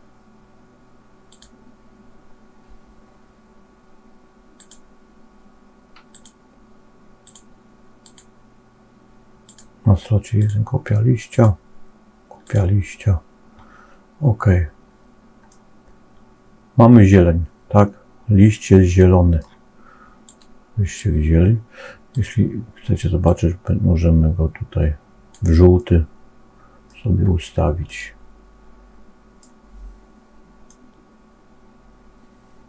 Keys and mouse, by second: 4.5 click, 6.0 click, 7.1 click, 7.9 click, 9.4-10.4 drag, 11.2-12.5 drag, 15.4-19.3 middle drag, 20.1 click, 22.0 click, 25.6-26.9 middle drag, 27.9-29.4 middle drag, 30.6-32.6 middle drag.